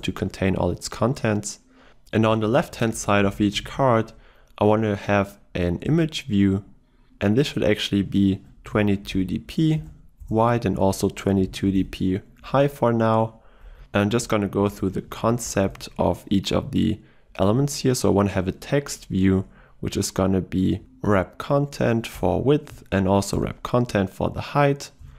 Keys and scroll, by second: 6.1 Return, 9.8 Return, 17.7 Return, 20.8 ctrl+space, 22.5 Return.